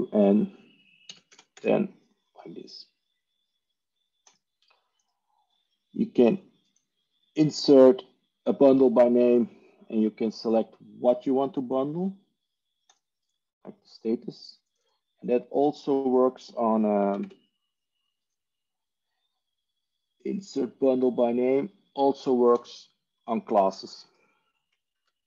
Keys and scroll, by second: 2.7-3.4 typing, 11.4 typing, 15.2 ctrl+e, 15.3 Tab, 17.3 Tab, 24.9 alt+F4.